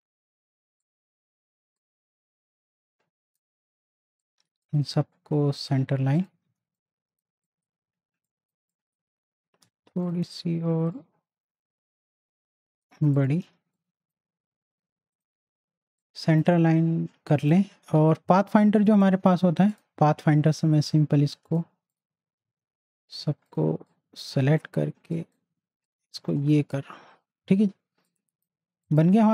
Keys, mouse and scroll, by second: 6.4 z, 6.7 click, 7.9 space, 8.3 click, 9.6 v, 10.0 click, 11.2-13.1 alt+shift+drag, 13.5 z, 13.7-17.4 drag, 19.7 click, 22.6 ctrl+z, 23.5 click, 26.1 z, 26.4-29.3 drag.